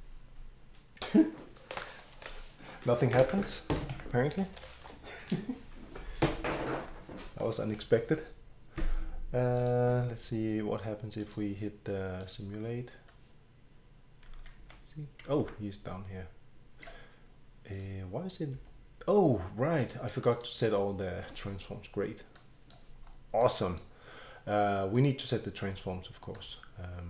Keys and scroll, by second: 3.9 Escape, 7.8 Escape, 14.4 q, 14.6 q, 15.4 e, 18.5 Escape.